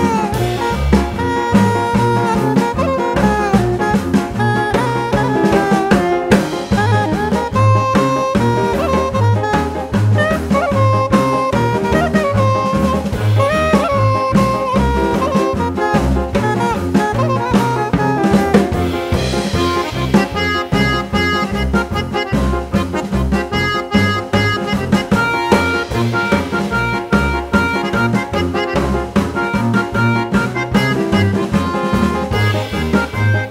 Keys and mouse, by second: 0.1-1.9 drag, 3.7-5.7 drag, 6.3 click, 8.1 g, 11.7-13.5 drag, 14.6-16.4 drag, 18.0 click, 18.1 click, 19.3 click, 21.6-23.7 drag, 26.0-28.0 drag, 29.9 g.